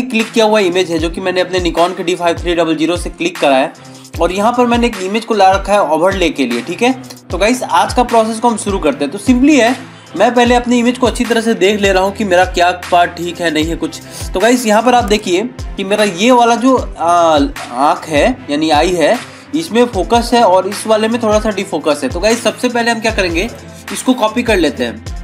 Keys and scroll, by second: 2.3 ctrl+-, 8.3 ctrl+=, 15.9 ctrl+=.